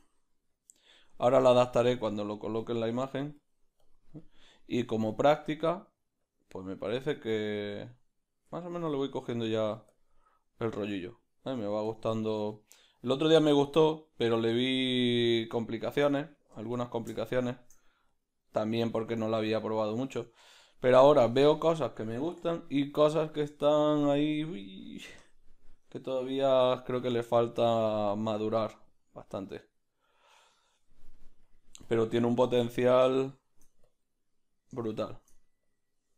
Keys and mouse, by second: 0.7-5.3 drag, 5.3 middle click, 6.2-7.3 drag, 7.3 middle click, 7.8-9.9 drag, 8.2-11.2 middle drag, 9.9 f, 11.2-13.3 drag, 11.9 f, 12.1 ctrl+middle click, 12.4 middle click, 13.3 middle click, 13.6-21.7 drag, 16.6 ctrl+z, 16.8 ctrl+middle click, 20.0 middle click, 20.3 ctrl+middle click, 21.0 shift+middle click, 21.7 Tab, 21.7-23.3 middle drag, 22.3 \, 22.5 \, 23.3-25.3 right drag, 23.6 ctrl+middle click, 25.1 KP_Decimal, 25.3 KP_Decimal, 25.4 middle click, 26.4 \, 26.6 \, 26.8 middle click, 27.8 Tab, 27.8 b, 27.9 middle click, 29.1-31.5 ctrl+middle drag, 31.5-36.1 drag, 32.3 middle click, 33.1 shift+middle click.